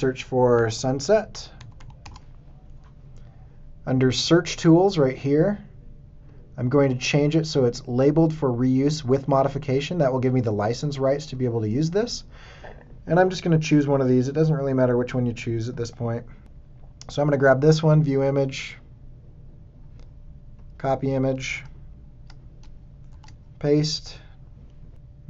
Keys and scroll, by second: 0.2-1.1 typing, 2.0 Return, 14.9 space, 21.5 super+Tab, 23.0 super+v.